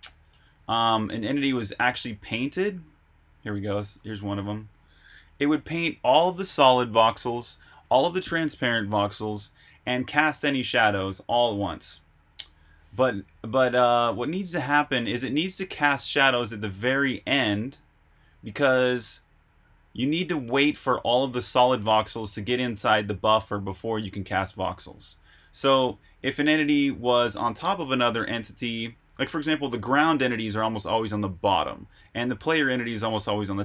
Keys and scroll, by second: 0.0-3.1 typing, 0.6 Escape, 5.2 typing, 13.6 Escape, 14.0 typing, 15.1-18.6 typing, 19.9-22.5 typing, 24.8 Escape.